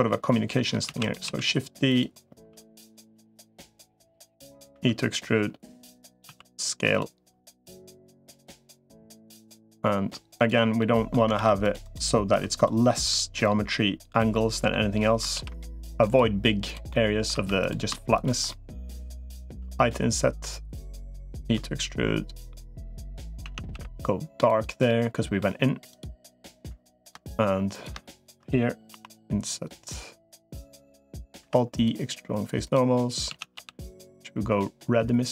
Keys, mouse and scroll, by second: 0.7 shift+d, 1.1 s, 2.3 s, 3.1 click, 4.1 click, 4.5 e, 6.1 s, 7.3-8.3 drag, 7.5 s, 8.3 middle click, 9.0 middle click, 10.6 middle click, 11.1 ctrl+r, 12.3 3, 12.7 middle click, 13.3 click, 14.1 middle click, 15.1 ctrl+r, 16.7 middle click, 17.3 3, 18.3 middle click, 19.3 i, 21.3 e, 23.3 a, 23.5 g, 24.7 middle click, 25.7 click, 26.0 middle click, 27.9 shift+click, 28.7 i, 30.8 middle click, 31.3 alt+e, 33.1 a, 33.5 g.